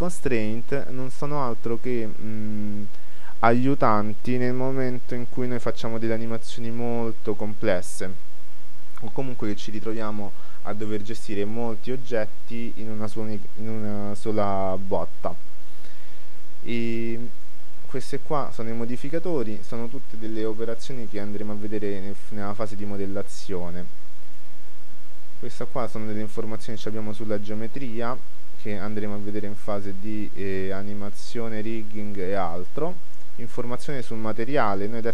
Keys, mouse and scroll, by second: 8.1-25.9 middle drag, 26.9-30.1 middle drag, 33.5-35.0 middle drag.